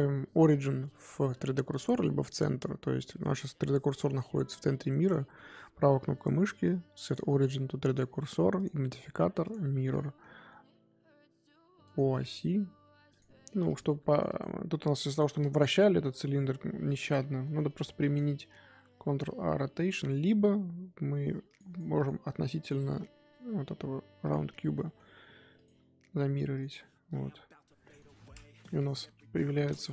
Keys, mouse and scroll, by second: 1.5-5.0 middle drag, 5.0-8.5 right drag, 9.9-11.8 middle drag, 11.8 click, 12.2 click, 13.1-14.2 drag, 14.3 click, 16.8 click, 19.1 ctrl+a, 21.4-22.0 drag, 25.5 click, 26.1-26.5 middle drag, 26.5 click, 26.8-28.0 middle drag, 28.0-29.0 scroll up 2, 29.0 KP_1, 29.7 click.